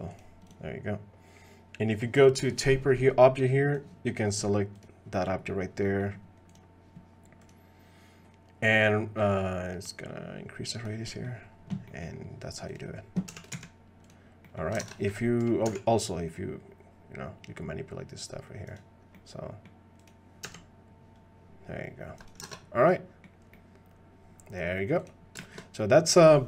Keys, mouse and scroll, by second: 0.5 click, 5.1 click, 5.8 click, 7.4 click, 9.2-10.8 drag, 11.0 click, 11.9 click, 13.3 g, 14.5 click, 15.7 ctrl+Tab, 15.7 s, 19.1 click, 19.3 middle click, 20.5 g, 22.5 ctrl+Tab, 22.8-23.2 drag, 23.5-24.7 drag, 25.4 shift+click.